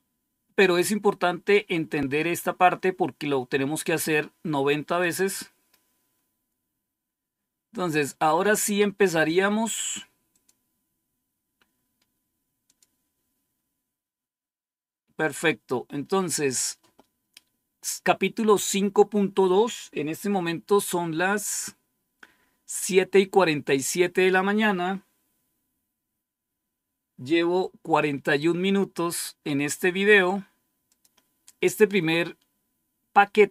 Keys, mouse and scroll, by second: 4.8 click, 10.2 click, 12.5 click, 30.8 click.